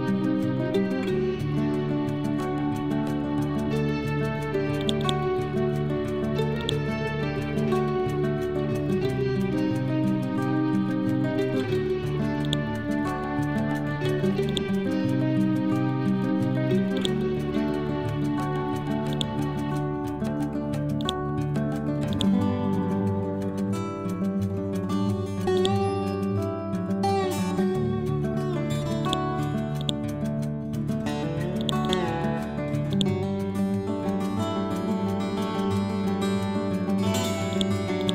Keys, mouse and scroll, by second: 4.7-8.0 drag, 7.8-8.7 typing, 8.9 shift+Tab, 10.1-11.0 typing, 11.9 scroll down 1, 12.3 click, 13.0 scroll up 1, 14.3 click, 15.2 ctrl+z, 15.7 ctrl+Home, 16.8-24.1 drag, 24.1 ctrl+Home, 24.9-25.4 scroll down 1, 25.4 click, 26.0-27.9 scroll up 1, 28.2 scroll down 1, 28.9 click, 34.0 typing, 34.6 shift+Tab, 37.4 click.